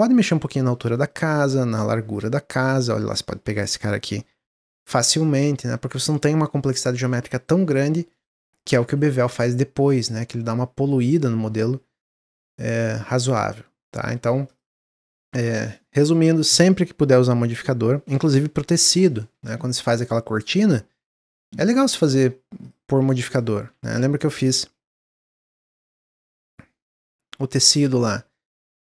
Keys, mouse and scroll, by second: 1.7 click, 3.4 g, 5.2 Tab, 5.5-8.5 middle drag, 8.5 click, 10.5-12.7 drag, 12.7 Tab, 13.0 Tab, 13.3-13.6 scroll down 2, 13.6-14.4 middle drag, 14.4 click, 19.5-21.0 shift+middle drag, 21.0 shift+a, 23.0 g, 23.7 Tab, 24.1 click, 25.4 click, 25.7 g, 27.2 middle click, 27.7 Tab, 27.9-28.3 scroll up 2, 28.3 shift+middle click.